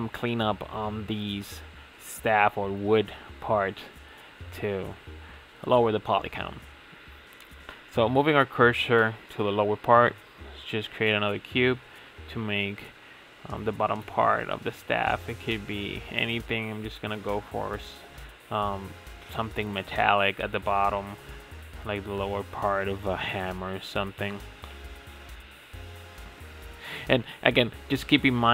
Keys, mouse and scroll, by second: 3.2 Tab, 3.5-3.8 scroll down 3, 3.8 click, 4.6 shift+a, 5.3 shift+s, 7.1-8.3 middle drag, 8.3 shift+a, 10.1 s, 12.3-13.3 middle drag, 13.3 Tab, 13.6 click, 14.5 3, 14.6 click, 15.4 i, 16.3 g, 18.4 ctrl+b, 21.9 click, 23.4 g, 24.9-26.3 middle drag, 26.3 click, 26.9 2, 27.2 click, 27.6 alt+click.